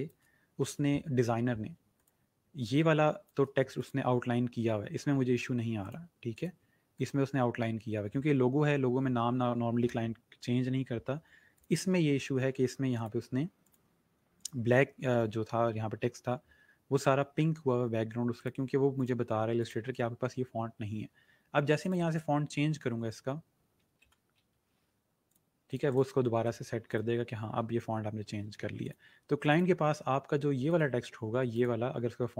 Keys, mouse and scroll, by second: 2.0 click, 2.6 space, 2.8 click, 3.1 space, 3.7 click, 5.7 click, 11.5 click, 18.2 click, 21.7 click, 23.4-24.7 typing, 25.3 click, 27.3 click, 28.4 ctrl+z, 28.7 click.